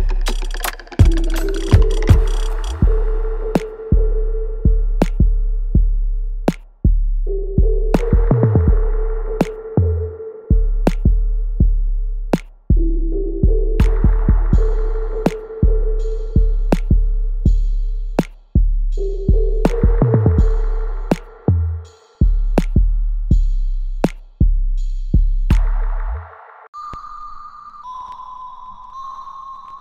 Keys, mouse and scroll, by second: 0.4-3.8 alt+drag, 3.8 click, 4.1 alt+middle click, 4.7 alt+right click, 6.0-9.3 alt+drag, 9.3 click, 10.6 ctrl+z, 11.5-15.7 ctrl+drag, 15.7 alt+click, 16.3 alt+right click, 17.1-22.0 ctrl+drag, 22.0 alt+middle click, 22.5-24.8 alt+drag, 24.8 alt+right click, 26.0-29.5 ctrl+drag, 29.5 alt+right click.